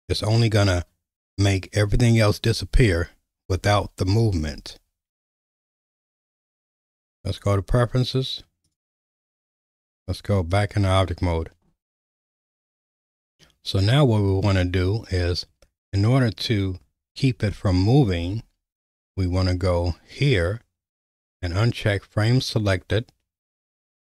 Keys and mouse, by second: 2.9 /, 3.6 /, 4.1 /, 4.5 /, 9.3 /, 9.5 Tab, 13.4-14.4 middle drag, 18.2 /.